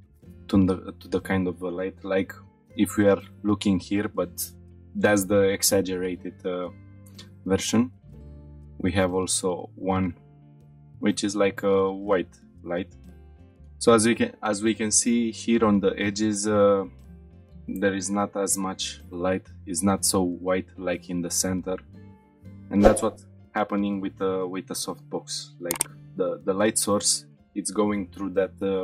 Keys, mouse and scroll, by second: 2.2-3.4 middle drag, 7.9-8.4 shift+middle drag, 8.5-9.0 middle drag, 9.1-10.0 shift+middle drag, 10.4-10.8 shift+middle drag, 10.9-11.4 scroll down 2, 11.5-12.1 shift+middle drag, 12.2-13.0 middle drag, 13.0 shift+middle click.